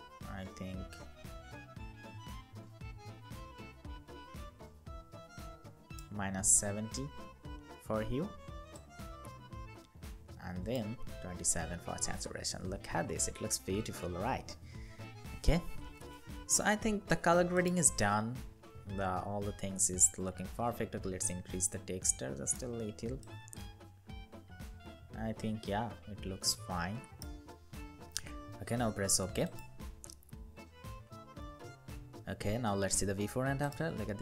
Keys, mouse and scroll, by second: 19.1-21.1 scroll down 1, 23.0 scroll down 1, 26.2 scroll down 1.